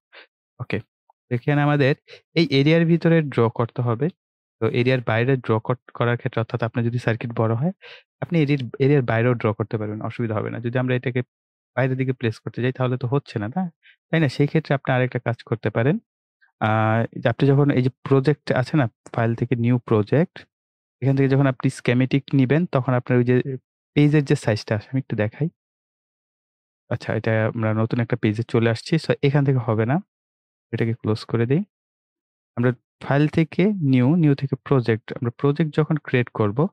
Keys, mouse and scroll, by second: 1.1-1.7 scroll up 1, 1.9-2.2 ctrl+scroll up 1, 2.2 ctrl+scroll down 1, 10.7-15.3 drag, 19.2 click, 24.9 click, 29.0 right click, 30.6 click, 35.1 click.